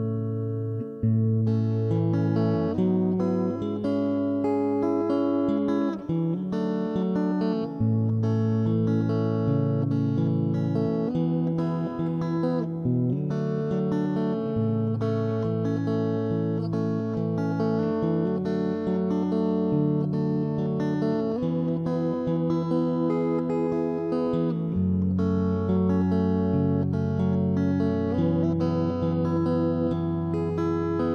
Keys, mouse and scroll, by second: 0.3 ctrl+,, 0.4 s, 1.1 middle click, 1.1 click, 1.1 right click, 1.4 s, 2.0 right click, 2.2 Escape, 2.2 click, 3.2 g, 3.9 click, 4.4 ctrl+3, 4.8 middle click, 5.7 g, 6.6 click, 6.7 middle click, 7.0 middle click, 7.1 right click, 7.4 s, 8.8-9.8 middle drag, 9.2 Tab, 9.9 middle click, 10.2 ctrl+s, 11.2 ctrl+s, 12.1 shift+space, 12.5-14.1 drag, 14.1 ctrl+KP_3, 14.2 shift+space, 14.3 middle click, 14.7 z, 14.9 Tab, 14.9 middle click, 15.3 a, 15.5 a, 15.7 right click, 16.1 middle click, 16.4 Left, 16.5 Left, 16.7 KP_3, 17.9 ctrl+Tab, 18.1 middle click, 18.3 click, 19.0 s, 20.2 middle click, 21.8 right click, 22.2 ctrl+KP_3, 22.8 c, 24.8 s, 25.7 middle click, 26.0 ctrl+KP_3, 26.7 middle click, 27.3 ctrl+s, 28.3 click, 28.5 ctrl+KP_Subtract, 28.8 s, 30.1 middle click, 30.7 ctrl+KP_1, 30.8 middle click.